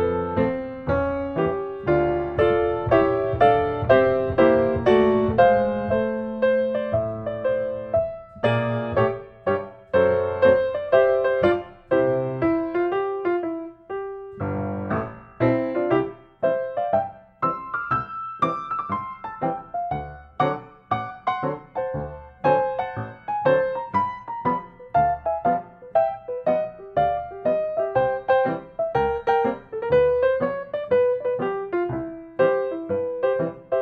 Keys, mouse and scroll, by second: 0.1 click, 1.5-1.8 scroll, 2.1 middle click, 2.2 middle click, 2.3 middle click, 4.7 s, 5.6 click, 7.0 click, 8.1 click, 10.4 typing, 10.9 Return, 13.5 click, 14.7 click, 15.5 click, 16.4-16.8 typing, 17.1 Return, 18.3 Escape, 19.2 click, 21.0 click, 21.8 scroll, 23.2 ctrl+space, 24.1 click, 25.5 click, 25.9 scroll, 27.3-28.2 scroll, 30.3 click, 31.5 click, 32.1 Escape, 33.5 click.